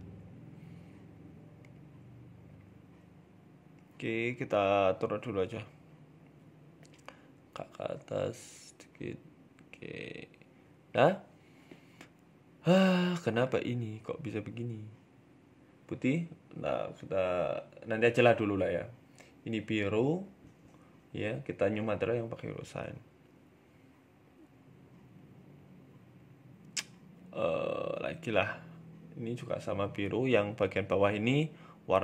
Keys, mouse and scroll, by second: 0.3 ctrl+r, 2.3 click, 3.9 scroll up 1, 4.6 c, 6.5 alt+shift+Right, 7.4 g, 9.6 click, 11.0 middle click, 11.9 alt+shift+Right, 12.2-13.1 scroll down 5, 13.7 click, 14.1 click, 19.0 click, 21.5 click, 22.3 scroll up 1, 22.5 scroll down 1, 22.8 middle click, 24.1 scroll up 1, 24.3 shift+middle click, 26.5 alt+shift+right click, 27.5 a, 27.5 a, 27.9 alt+shift+right click, 28.7 click, 29.1 alt+shift+Right, 29.1 scroll down 2, 29.2 Tab, 29.3 middle click, 30.6 Tab, 30.6 middle click, 30.8 scroll up 1, 31.3 alt+shift+Right.